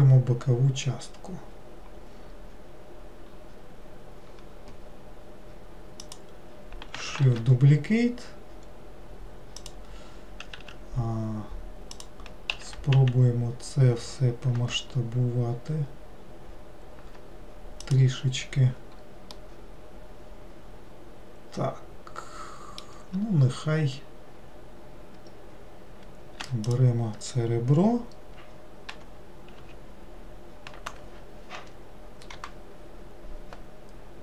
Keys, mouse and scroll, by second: 3.4-4.3 scroll up 2, 6.1 click, 7.3 shift+d, 19.4-22.6 middle drag, 26.8 click.